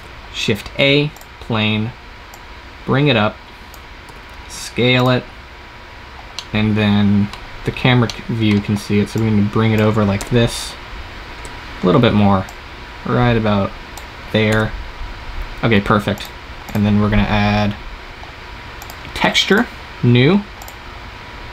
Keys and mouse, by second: 3.9 s, 9.0-10.1 right drag, 10.1 KP_0, 11.4 KP_0, 14.4 KP_0.